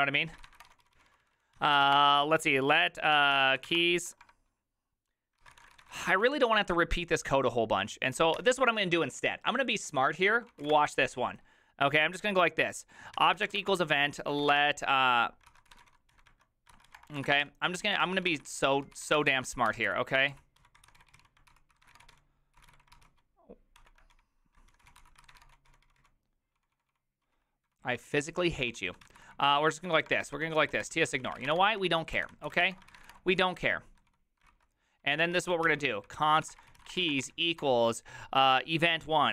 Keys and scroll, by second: 0.0-4.2 typing, 5.3-8.9 typing, 10.2-11.2 typing, 13.2-37.8 typing, 23.8 ctrl+d.